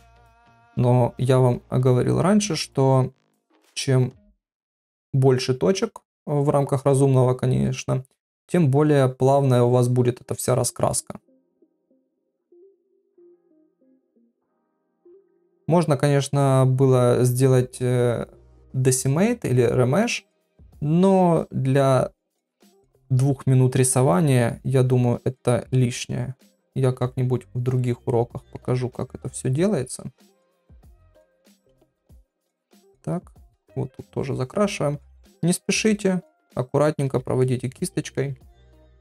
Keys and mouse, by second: 0.7-1.8 drag, 2.8-6.4 drag, 7.3-9.0 drag, 9.7-12.1 drag, 11.7 shift+middle click, 13.0-15.0 drag, 15.8-17.8 drag, 18.3-20.0 drag, 19.7 shift+middle click, 21.0-23.3 drag, 24.2-26.2 drag, 26.8-28.2 drag, 29.6-31.0 drag, 31.7-35.5 drag, 36.2-37.7 drag, 37.4 ctrl+middle click, 38.2 ctrl+middle click, 38.7 shift+middle click.